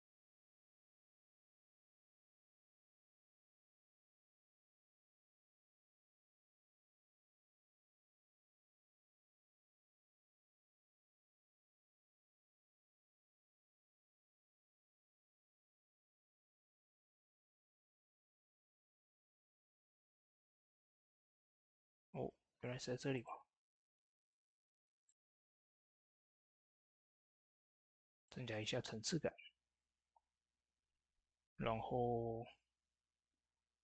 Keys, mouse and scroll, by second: 0.9-3.0 drag, 3.4 ctrl+z, 7.6 click, 8.7 middle click, 9.1 shift+middle click, 9.8 scroll up 1, 10.7 middle click, 11.5-14.1 drag, 20.5 scroll down 1, 21.5 shift+middle click, 21.9 scroll up 1, 23.0-29.0 drag, 29.1 ctrl+s.